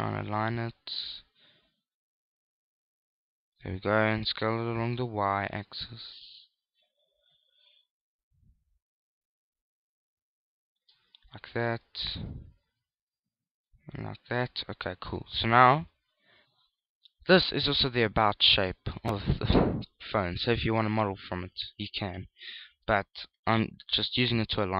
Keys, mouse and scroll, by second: 0.5 click, 4.9 s, 11.5 shift+click, 12.9 shift+click, 16.2 KP_1, 16.7 KP_3, 17.7 middle click, 20.6 middle click, 22.9 KP_1.